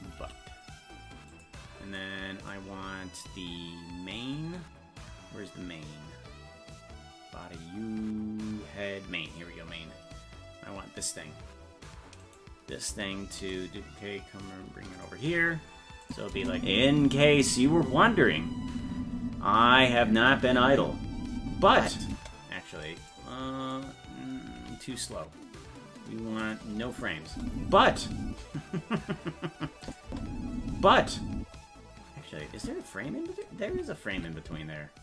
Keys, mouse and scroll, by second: 0.2 g, 4.2 scroll down 2, 4.9 scroll down 2, 7.2-7.8 scroll up 1, 9.3-12.2 scroll up 2, 12.2 right click, 13.2 shift+d, 16.0 click, 16.3 space, 17.2-18.2 scroll up 1, 18.2-18.6 scroll up 4, 22.1 space, 23.0 right click, 24.5 g, 26.9 click, 27.3 space, 29.8 click, 30.1 space, 32.6 click, 33.7 Left, 34.1 Right.